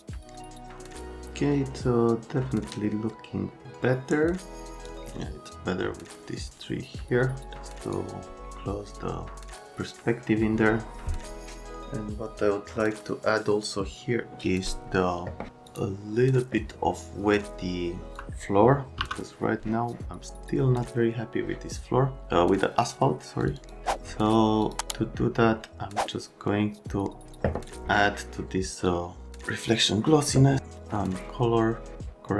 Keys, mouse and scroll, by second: 4.8 click, 15.6 click, 18.2 F3, 19.0 m, 23.6 click, 24.6 click, 24.8 click, 28.8 click, 30.9 click.